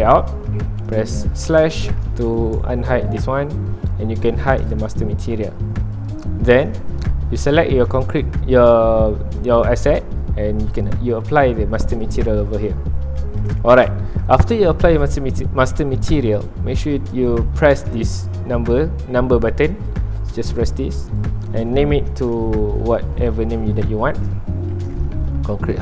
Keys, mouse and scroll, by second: 0.3 middle click, 1.1 /, 2.1 alt+a, 2.3 middle click, 2.7 ctrl+s, 4.6 click, 5.1 h, 6.0 click, 7.2-12.1 middle drag, 12.1 click, 12.9 middle click, 13.2 alt+a, 14.6-20.6 middle drag, 20.6-25.8 drag.